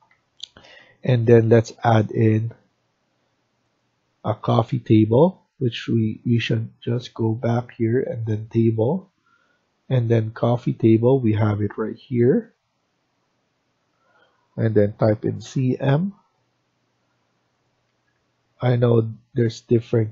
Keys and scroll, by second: 0.0 Escape, 14.9-15.3 typing, 17.8 Escape, 18.0 Escape.